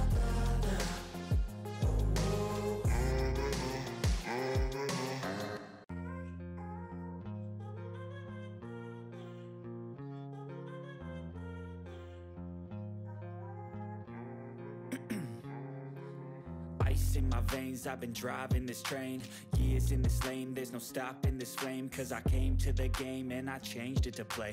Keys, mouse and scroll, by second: 0.7 Left, 3.1-3.4 ctrl+scroll down 1, 4.5 ctrl+scroll down 1, 4.7-5.1 drag, 5.9 ctrl+scroll down 2, 6.0-6.3 ctrl+middle click, 6.5-6.8 ctrl+scroll up 2, 7.1-7.7 scroll down 2, 7.7 click, 8.9 ctrl+d, 9.0-9.9 drag, 12.6 ctrl+scroll down 1, 12.8 ctrl+middle drag, 14.0 click, 15.7-17.4 typing, 16.5 click, 17.0-20.2 drag, 21.1 5, 21.4 click.